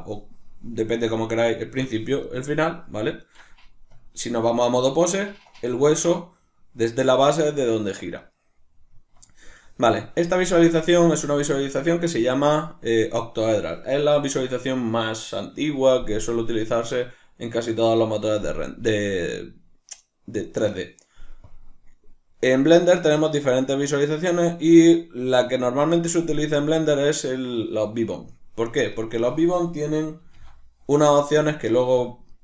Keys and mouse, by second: 1.4 right click, 2.2 right click, 3.2 right click, 3.9 Tab, 5.1 right click, 6.1 r, 8.3 right click, 9.0 Tab, 21.5-29.0 drag, 29.0 right click, 30.2 g, 32.1 click, 32.3 right click.